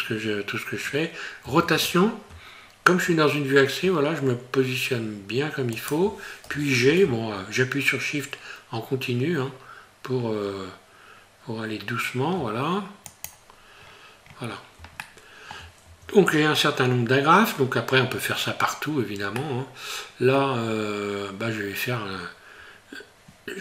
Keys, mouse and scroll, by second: 1.4 r, 13.8-14.6 scroll down 7, 15.0 shift+middle click, 15.8 Tab, 16.4 scroll up 2, 17.5-18.1 scroll down 3, 19.4 middle click, 20.6 scroll up 2, 21.3 scroll down 1.